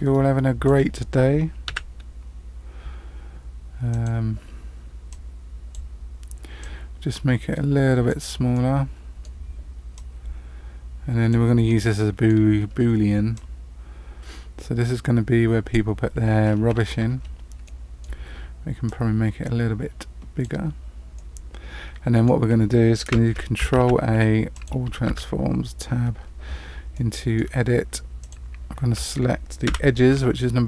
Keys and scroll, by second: 1.6 s, 23.7 ctrl+a, 25.0 Tab, 29.6 2.